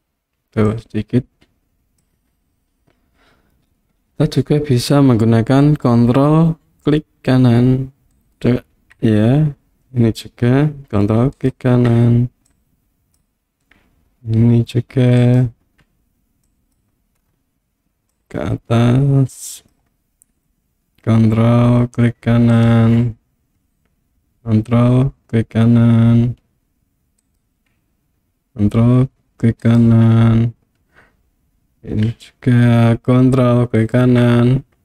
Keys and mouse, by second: 0.7-2.0 drag, 8.2 ctrl+right click, 11.4 ctrl+right click, 12.5 click, 16.5 click, 18.1-19.7 drag, 27.3 ctrl+right click, 29.6 ctrl+right click, 33.8 ctrl+right click.